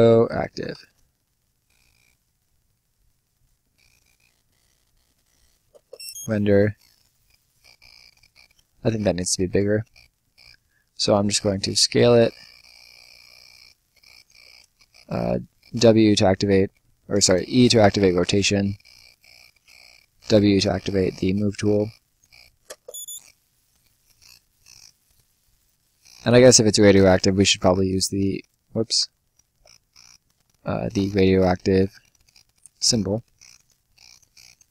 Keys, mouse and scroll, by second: 0.0-1.1 typing, 2.2 e, 3.3 click, 4.6-5.0 scroll up 1, 5.0 scroll down 1, 5.0 middle click, 5.6 space, 6.6 right click, 7.2-8.0 scroll up 1, 8.0 click, 14.5 r, 14.9 e, 17.2 middle click, 18.7 click, 19.6 w, 20.5 click, 23.2 space, 23.6-24.0 scroll down 1, 24.0 right click, 25.4 click, 29.3 ctrl+click, 30.7 ctrl+z, 31.1 click.